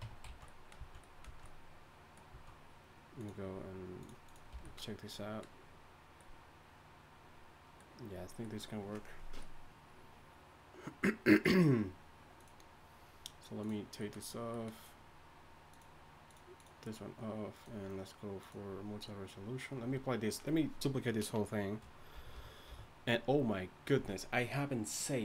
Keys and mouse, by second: 0.0 Tab, 0.3 z, 2.3 z, 4.5 a, 22.1 a, 22.3 a, 22.7 a.